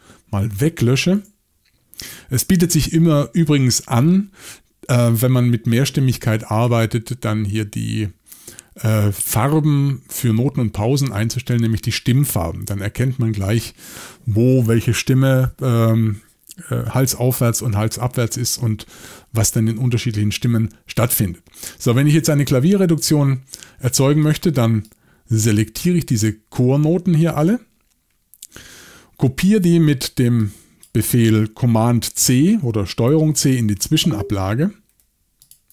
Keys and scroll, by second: 1.2 BackSpace, 33.9 super+c.